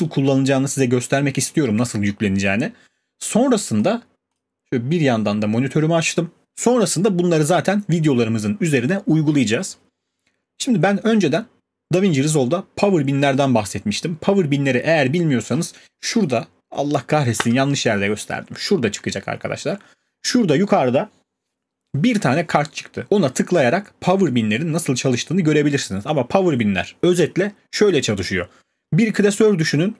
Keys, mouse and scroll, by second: 4.4 click.